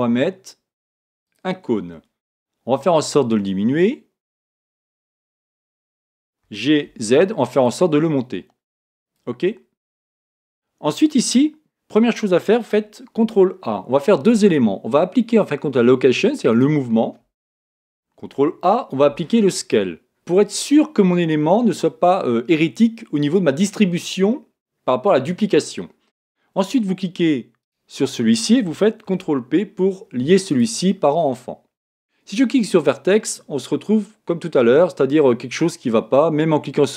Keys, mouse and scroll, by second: 2.7 s, 5.6 click, 6.4 g, 9.1 click, 13.2 ctrl+a, 18.2 ctrl+a, 19.1 ctrl+a, 27.6-29.6 right drag, 29.0 ctrl+p, 32.7 click.